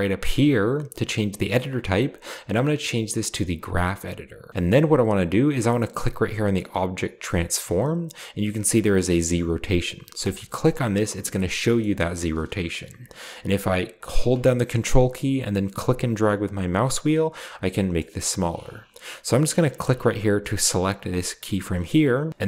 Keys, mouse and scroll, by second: 0.9 click, 3.6 click, 5.6-6.3 drag, 6.7-7.4 drag, 8.8-9.6 drag, 10.2 click, 10.7-11.8 scroll down 2, 11.0 click, 11.6 middle click, 15.7-18.2 ctrl+middle drag, 19.8 click, 21.1 middle click, 21.2 right click.